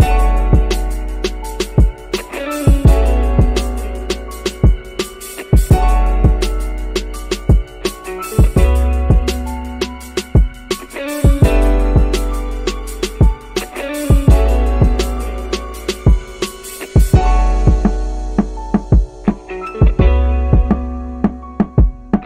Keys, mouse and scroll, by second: 3.4-15.1 drag, 16.7 click, 18.4-19.8 drag.